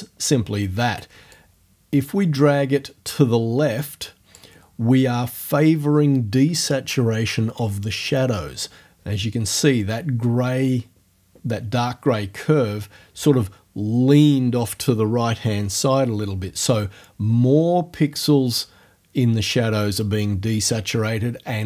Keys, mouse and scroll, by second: 1.3-4.5 drag.